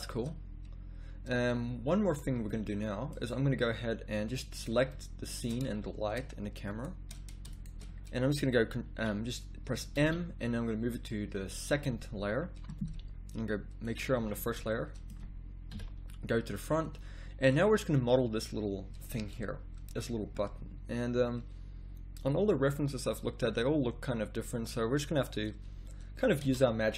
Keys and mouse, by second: 2.1 z, 2.3 z, 3.1 middle click, 4.5 right click, 5.6 z, 8.8-9.9 right drag, 9.9 m, 13.8 click, 14.2 z, 14.8 click, 15.7 KP_1, 22.2 click, 26.4 z, 26.8 s.